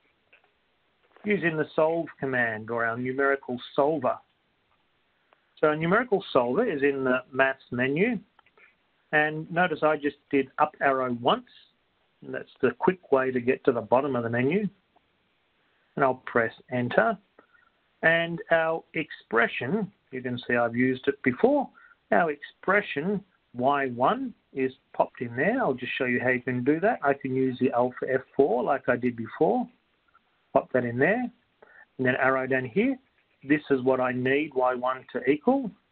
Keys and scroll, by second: 3.7 Up, 17.0 Return, 30.2 1, 32.6 Down.